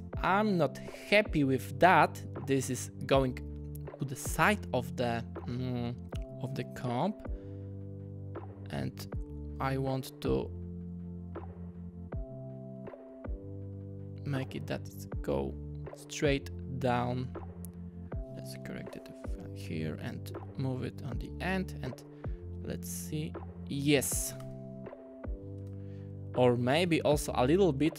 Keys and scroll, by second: 9.5 typing, 18.3-19.2 typing, 20.5 alt+Right, 21.7 -, 24.4 space.